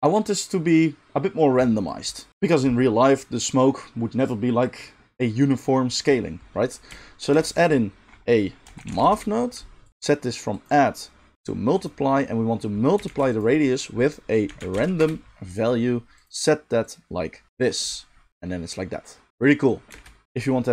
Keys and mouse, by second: 7.3 shift+a, 9.9-10.6 middle drag, 10.6-16.3 drag, 13.0 shift+a, 16.3-16.8 middle drag, 16.8-20.7 drag, 18.3 space, 19.9 space.